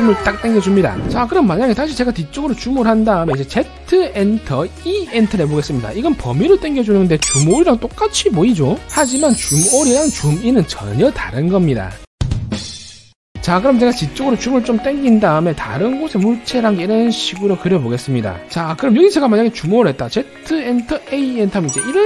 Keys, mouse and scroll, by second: 2.2 middle click, 2.4-2.8 scroll down 2, 3.0 middle click, 4.1 z, 5.1 e, 14.6-15.4 scroll down 3, 15.6 middle click, 16.5 c, 16.9 right click, 17.3 click, 18.2 click, 20.4 z, 21.4 a.